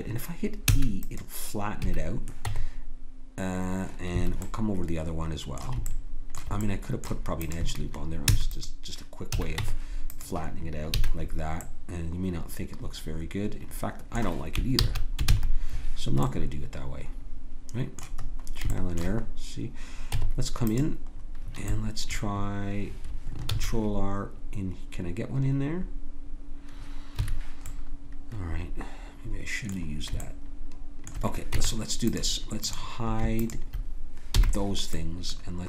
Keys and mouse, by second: 0.6 e, 1.8 a, 2.4 Tab, 4.5 click, 7.4-8.4 drag, 8.3 e, 9.3 a, 9.6 Tab, 10.9 a, 14.8 ctrl+z, 15.3 ctrl+z, 20.1 Tab, 23.5 ctrl+r, 28.7-30.0 middle drag, 30.2-31.5 middle drag, 31.5 Tab, 32.6-34.9 drag, 34.3 h.